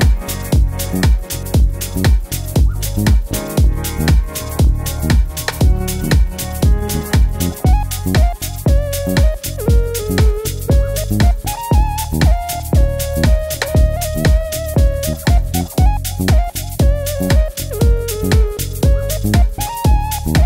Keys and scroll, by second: 3.0 super+Up, 3.1 super+Up, 3.2 super+Up, 16.9 Right, 17.1 Right, 18.1 Right, 18.7 Left.